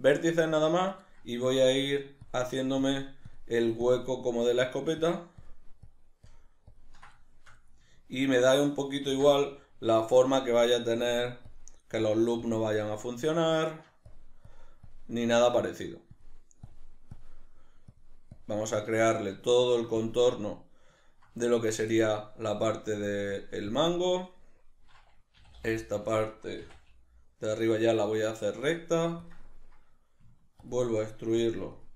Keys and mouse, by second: 2.2-7.2 ctrl+drag, 7.2 shift+middle click, 8.0 ctrl+click, 9.1 ctrl+z, 11.0-19.0 ctrl+drag, 19.0-20.0 shift+middle drag, 20.0 ctrl+click, 21.0-23.3 ctrl+middle drag, 23.3-25.3 ctrl+drag, 25.3 e, 29.3 click, 30.6-31.9 ctrl+drag.